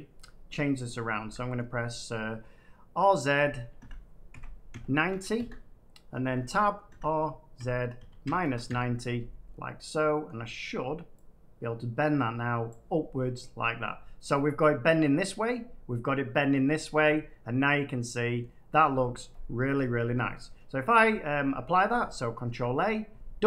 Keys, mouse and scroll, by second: 1.1 Tab, 1.2 middle click, 3.7-4.9 typing, 5.3 Return, 6.1 Tab, 6.8 r, 7.5 z, 7.9 -, 8.2 9, 9.4-11.1 middle drag, 9.5 typing, 12.6-13.7 drag, 13.8-14.8 middle drag, 15.4 middle click, 16.5-17.8 scroll up 2, 18.3 middle click, 19.0 scroll, 20.4 middle click, 20.5 scroll, 20.5-20.9 scroll up 1, 21.9-22.4 scroll up 1, 22.4 ctrl+a.